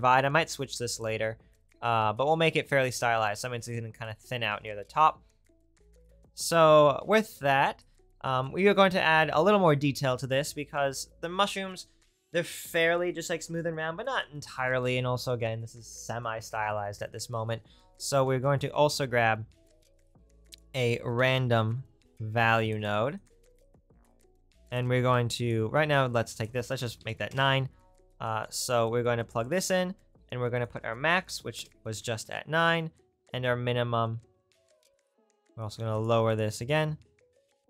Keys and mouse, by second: 18.4 shift+a, 23.2 right click, 23.3-37.6 drag.